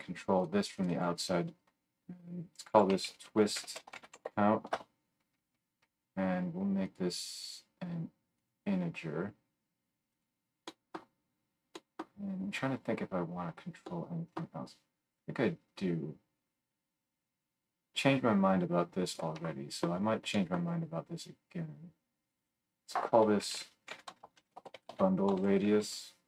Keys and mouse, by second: 0.4 right click, 0.7 middle click, 0.8 right click, 0.9-10.2 middle drag, 10.2-17.4 right drag, 17.4-20.4 middle drag, 22.2 click.